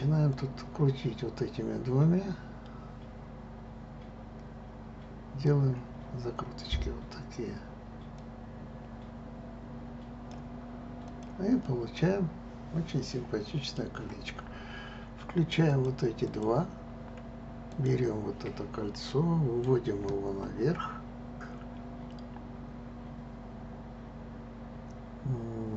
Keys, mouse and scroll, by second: 0.3-3.2 drag, 8.2-11.1 drag, 11.6-14.6 middle drag, 15.7 click, 16.2 click, 17.7 click, 19.1-19.7 middle drag.